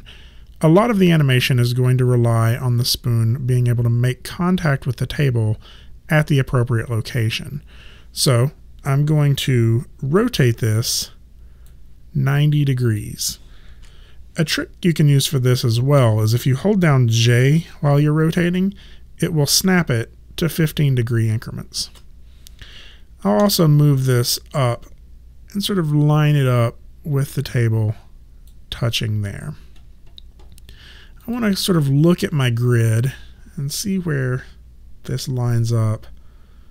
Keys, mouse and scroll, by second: 10.7 click, 12.8 click, 13.8 ctrl+z, 18.0 j, 18.3 click, 21.9 click, 23.4 w, 24.1 click, 31.2 click, 33.1 alt+click.